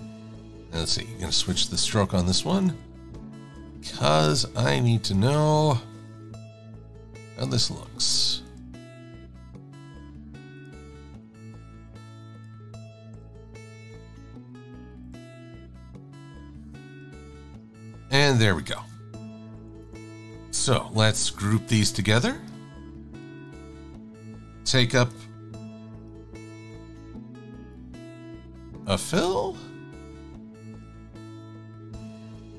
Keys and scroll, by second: 2.1 Right, 5.3 Right, 11.5 Left, 12.6 Left, 13.0 Left, 15.3 Left, 19.6 super+-, 20.0 super+-.